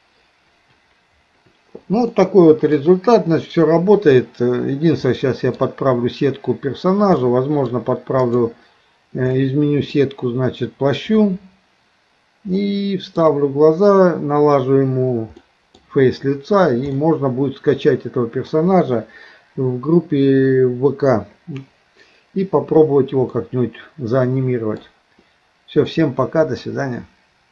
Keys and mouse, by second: 2.2 middle click, 5.1 middle click, 7.2 middle click, 8.3 click, 9.4 middle click, 12.6 middle click, 15.4 middle click, 17.0-18.6 middle drag, 23.4-24.8 middle drag, 25.9 middle click.